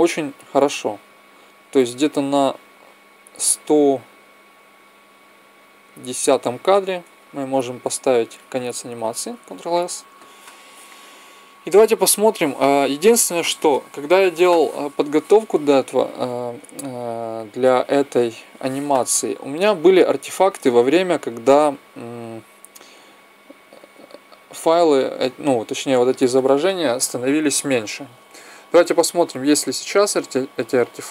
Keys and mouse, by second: 0.4-2.2 drag, 7.5 e, 9.0 ctrl+s, 10.6-12.5 drag, 19.8-21.6 drag, 29.2-31.1 drag.